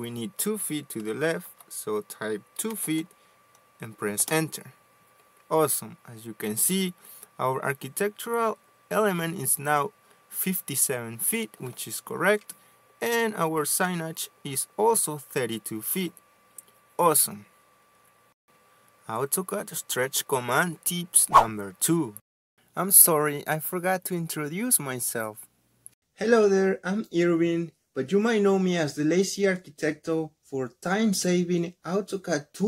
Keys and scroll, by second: 2.5 typing, 3.8 typing, 5.2 Return.